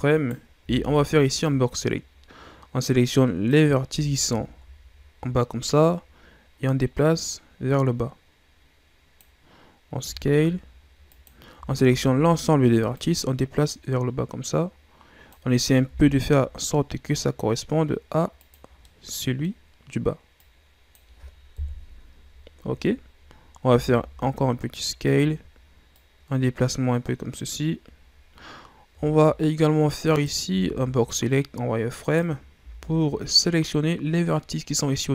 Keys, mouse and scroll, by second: 0.1 right click, 0.6 b, 3.9 z, 4.3-5.6 shift+scroll down 3, 5.6-8.7 drag, 9.9 s, 11.5 a, 11.8 a, 12.9-15.8 drag, 15.8 s, 18.6 scroll down 3, 18.8-20.3 middle drag, 20.3-21.5 drag, 21.5 KP_1, 23.1-23.6 scroll up 1, 23.6 s, 25.9-28.4 drag, 28.4-29.0 scroll up 1, 29.0-30.1 shift+scroll up 3, 30.1 right click, 30.5 z, 32.0 right click, 32.6 b.